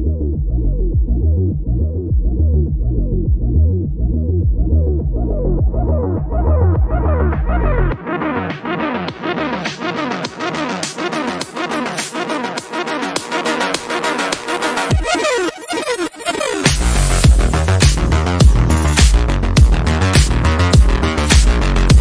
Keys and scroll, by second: 17.2 ctrl+s, 17.5-18.5 typing.